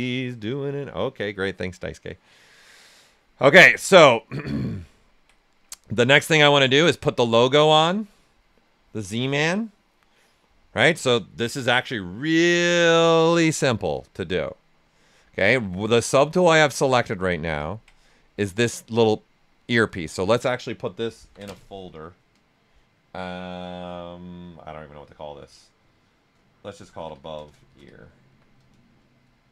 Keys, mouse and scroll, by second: 3.5 alt+right click, 3.7 ctrl+right click, 5.6 right click, 6.6 alt+right click, 13.2-14.8 shift+right drag, 14.8-17.5 drag, 20.6 ctrl+click, 21.1 ctrl+f, 26.2 ctrl+f, 26.5-29.5 typing.